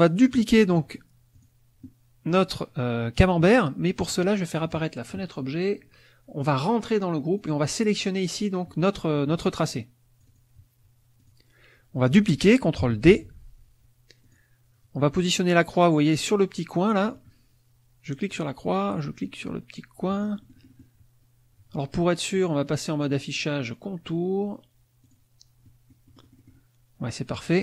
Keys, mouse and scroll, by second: 0.1 click, 1.3 click, 2.3 click, 4.1 click, 4.6 click, 6.5 click, 7.3 click, 9.7 click, 11.2 click, 13.1 ctrl+d, 14.3 click, 16.8-21.0 drag, 22.3 click, 25.0 click, 25.6-27.5 middle drag, 27.4 KP_Subtract.